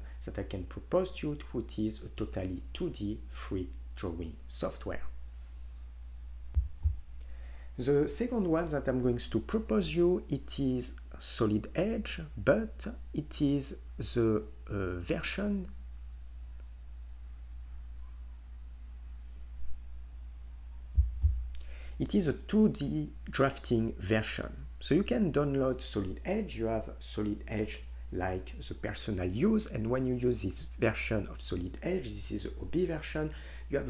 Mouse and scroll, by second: 4.7-5.3 right drag, 5.3 click.